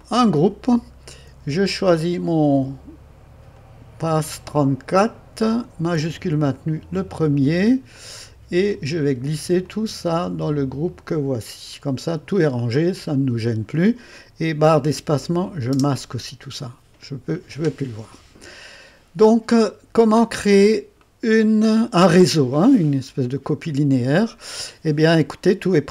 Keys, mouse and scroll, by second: 0.0 click, 2.0 click, 3.5-5.3 drag, 6.5 click, 8.0-11.4 drag, 12.7 click, 15.7 space, 21.0-25.9 right drag.